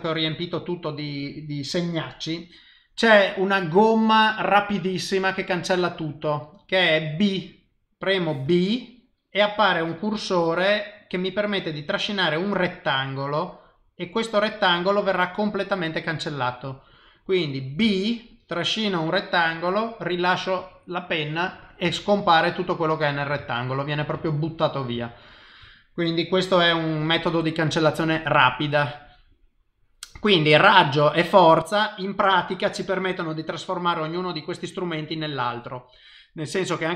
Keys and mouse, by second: 23.4 shift+middle click, 24.1 ctrl+middle click, 25.0 shift+middle click, 32.7 click.